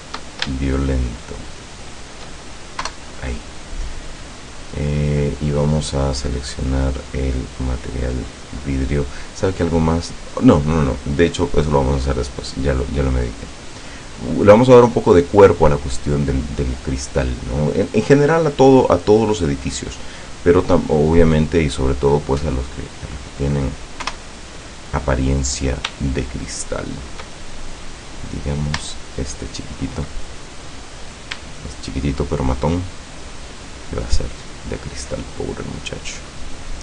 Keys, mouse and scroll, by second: 0.7 shift+right click, 1.2 shift+right click, 2.0 shift+right click, 2.8 KP_0, 6.1 click, 7.2 click, 13.0-15.0 middle drag, 15.0 middle click, 16.0-16.3 scroll up 2, 21.0-23.7 middle drag, 24.1 KP_0, 26.2-27.4 shift+middle drag, 27.8-28.3 scroll up 1, 29.0 shift+middle click, 31.0 right click, 31.7 shift+right click, 32.6 shift+right click, 33.7 shift+right click, 34.3 shift+right click, 35.8 click, 36.2 click, 36.6 click.